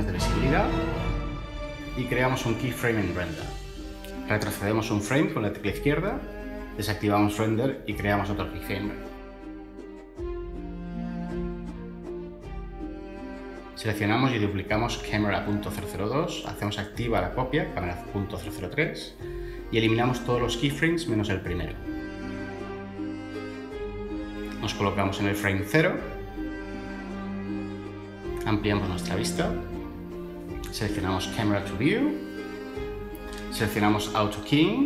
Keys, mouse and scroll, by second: 5.1 Left, 9.5 Right, 10.0 Right, 10.4 Left, 14.4 shift+d, 15.2 ↻, 24.6 Delete, 30.3 n.